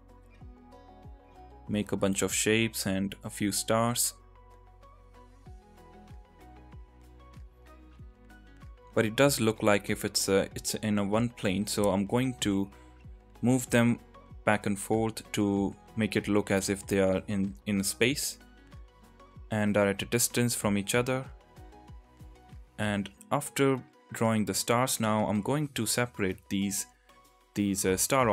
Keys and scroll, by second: 0.8 ctrl+z, 2.9 ctrl+z, 7.7 Tab, 8.3 Tab, 10.2 Tab, 11.5 g, 11.6 x, 12.7 g, 14.3-15.9 typing, 17.0 g, 18.1 g, 18.1 x, 19.3 g, 19.4 x, 19.9 g, 20.1 y, 20.9 Tab.